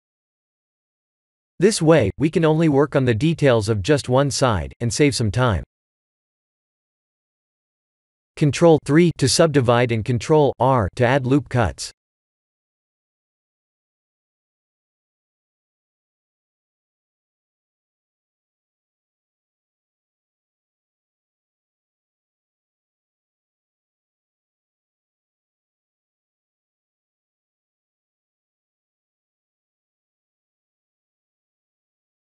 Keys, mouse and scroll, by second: 0.0 b, 1.2 g, 4.5 ctrl+z, 8.3 Tab, 9.4 ctrl+3, 12.2 Tab, 12.9 ctrl+r, 16.4 Tab, 17.4 Tab, 18.4 3, 18.5 click, 19.7 ctrl+r, 22.1 1, 22.6 click, 23.0 b, 23.7 g, 27.1 g.